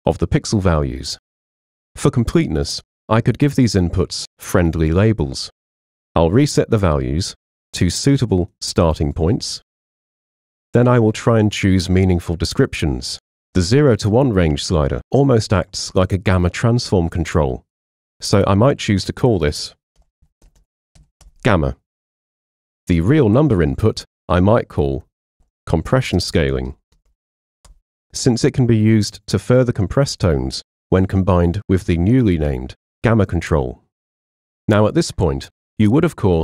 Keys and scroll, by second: 19.8-21.0 typing, 21.3 Return, 24.5-27.6 typing, 27.7 Return.